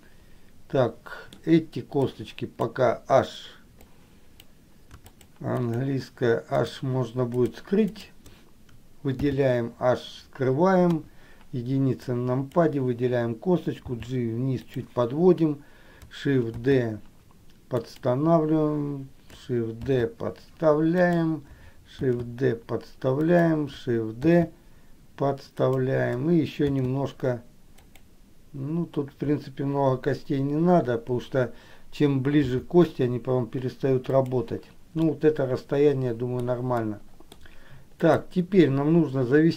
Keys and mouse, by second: 0.1-1.6 middle drag, 2.3 click, 4.1 click, 5.2 shift+click, 5.8 shift+click, 8.1 shift+click, 9.4 h, 11.1 KP_1, 12.4 click, 14.1 g, 16.9 shift+d, 20.1 shift+d, 27.0 shift+d, 35.3-36.6 middle drag, 37.0 middle click.